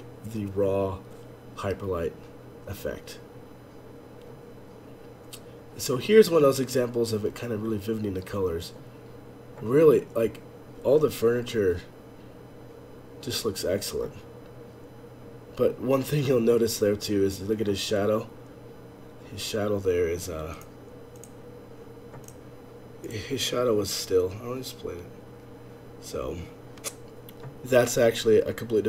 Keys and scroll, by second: 23.7 F11, 23.7 F8.